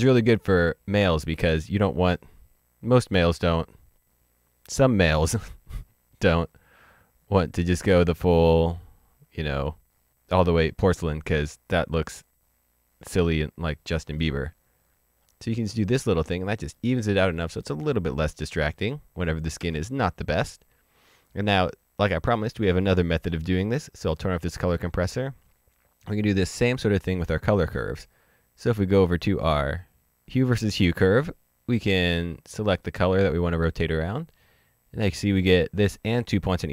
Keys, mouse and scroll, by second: 4.4 click, 6.3 click, 7.5 click, 13.9 click, 14.7-16.1 scroll down 1, 16.1 middle click, 16.7-17.3 scroll up 1, 17.3 middle click, 18.2 ctrl+d, 19.5 ctrl+d, 23.6 click, 27.6 click, 29.7 click, 32.9 click.